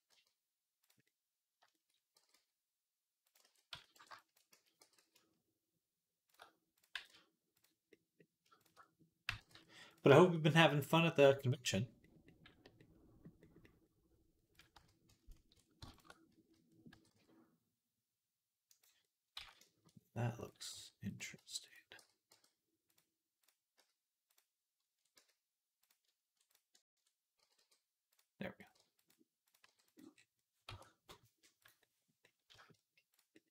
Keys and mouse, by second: 0.9 middle click, 1.0 middle click, 1.2 middle click, 2.0 middle click, 2.0 g, 3.3 ctrl+z, 3.8 b, 4.4 z, 4.6 g, 6.2-7.7 middle drag, 6.8 g, 7.9 middle click, 7.9 g, 9.1 g, 11.1-15.9 middle drag, 14.6 z, 16.2 z, 16.5-18.9 middle drag, 16.8 g, 19.3 ctrl+z, 20.6 g, 21.2 ctrl+z, 21.8 g, 23.6 z, 24.1 click, 25.0 z, 25.7 ctrl+click, 26.7 ctrl+click, 27.3 g, 28.4 click, 28.6 g, 29.5 g, 30.2 click, 30.5 Tab, 31.5 click, 32.4 shift+middle click, 32.7 middle click, 32.8 click.